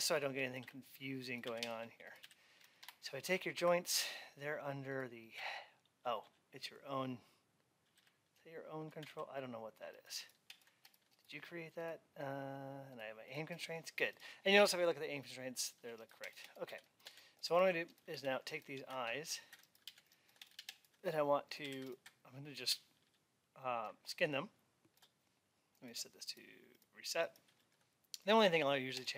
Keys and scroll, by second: 2.6 Up, 16.5 alt+x.